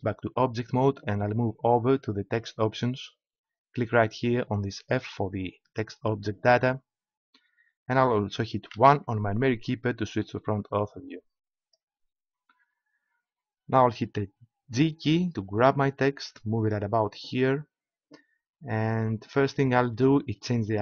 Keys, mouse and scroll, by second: 2.3-4.2 drag, 5.5-6.9 middle drag, 8.7 KP_1, 14.7 g, 17.5-18.9 drag.